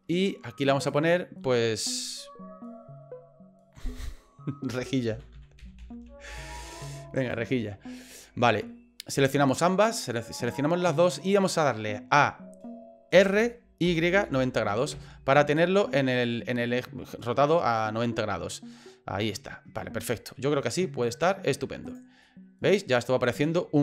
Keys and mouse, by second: 1.0-7.4 drag, 6.3 l, 8.4 middle click, 9.4 shift+right click, 13.1 r, 15.7-19.5 middle drag, 20.1 middle click, 21.2 middle click, 21.8 right click, 22.2-23.8 middle drag.